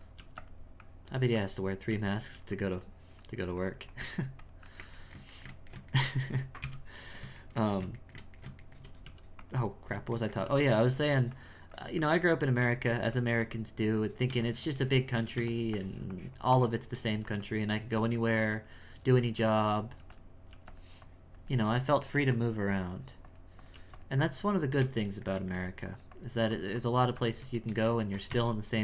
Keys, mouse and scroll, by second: 0.2 f, 0.8-1.9 drag, 1.9 f, 2.3 f, 2.8-5.0 drag, 5.0-6.6 ctrl+middle drag, 6.6 KP_1, 7.4-9.1 shift+middle drag, 9.1 f, 10.2 ctrl+middle click, 10.5 f, 10.9-15.3 drag, 15.3 f, 15.8-17.1 shift+drag, 17.1 f, 17.8 f, 18.2 click, 19.0 f, 19.4 click, 20.0 f, 20.5 f, 21.0-22.1 drag, 22.9 click, 24.2 click, 25.1 shift+middle click, 26.1 click, 27.6 shift+middle click, 28.3 Tab.